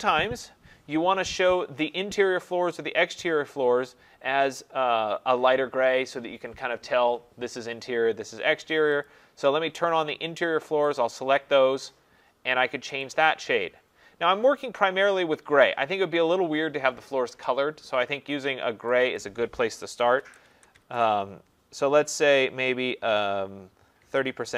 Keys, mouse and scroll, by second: 9.1 click, 11.0 click, 13.0 click, 13.3 click, 19.2 click, 20.1-22.4 typing, 23.8-24.5 typing.